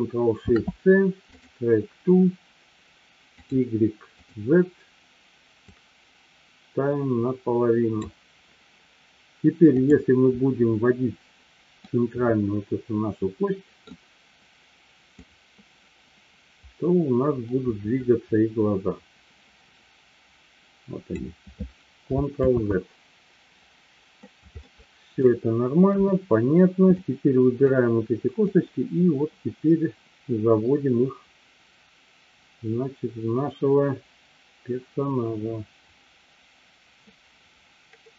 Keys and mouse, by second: 0.3 ctrl+shift+c, 5.7-8.7 drag, 11.8-13.8 middle drag, 15.2-21.5 drag, 22.8 ctrl+z, 24.7-25.2 middle drag, 26.0 KP_3, 27.0-27.7 drag, 28.5-38.1 drag.